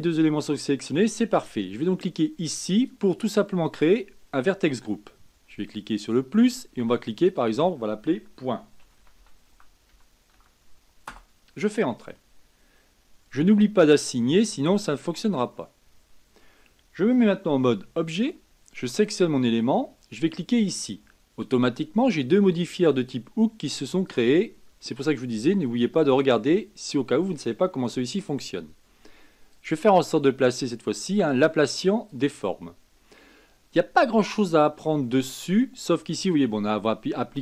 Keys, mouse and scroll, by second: 2.7 click, 6.0-7.2 drag, 7.3-10.4 drag, 14.1-17.2 drag, 17.8 Tab, 18.9 click, 20.7 click, 24.0 click, 25.1 click, 29.5-32.6 drag.